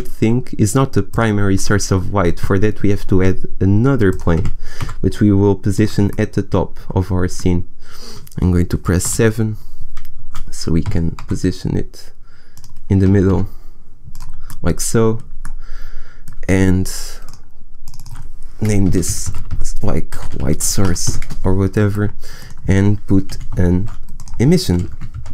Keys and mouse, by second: 3.1 s, 4.2 s, 4.4 g, 6.5 g, 9.0 KP_7, 10.7 g, 13.0 g, 23.2 Delete, 23.7 shift+a.